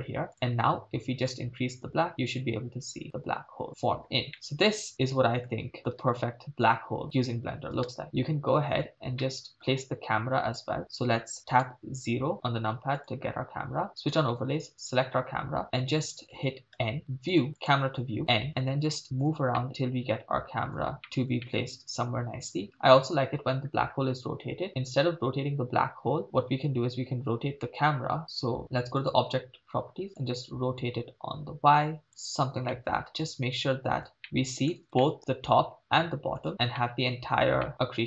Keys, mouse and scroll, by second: 0.3 click, 1.2-3.8 drag, 4.3 middle click, 4.9 middle click, 5.6 scroll down 2, 5.8 middle click, 6.0 shift+space, 7.9 shift+space, 8.0-8.8 middle drag, 9.2 middle click, 10.5-11.5 scroll down 2, 11.5 KP_0, 13.0 click, 14.7 right click, 16.7 n, 17.3 click, 17.6 click, 18.2 n, 18.5 middle click, 19.6 shift+middle drag, 21.4 shift+middle click, 29.0 click, 30.2-32.1 drag, 32.7 shift+middle click, 33.1 middle click, 34.0 middle click, 35.1 shift+middle click, 36.8 middle click, 37.7 shift+middle click.